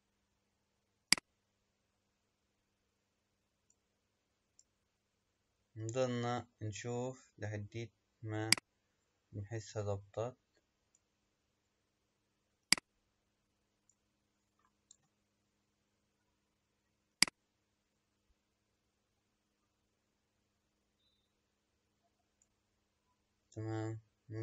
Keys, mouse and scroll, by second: 1.1 click, 4.7-6.9 middle drag, 6.9-8.4 scroll down 1, 8.4 click, 12.6 click, 15.0 KP_0, 17.1 click.